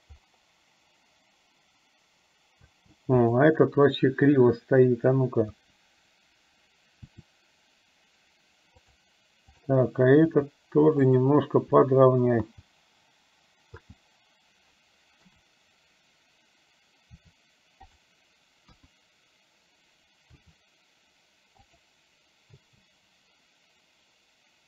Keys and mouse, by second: 2.8 space, 3.2 click, 5.5 KP_1, 7.2 r, 9.7 click, 12.5 space, 13.8 space, 15.3 KP_7, 17.2 r, 18.8 KP_1, 20.4 r, 22.7 space.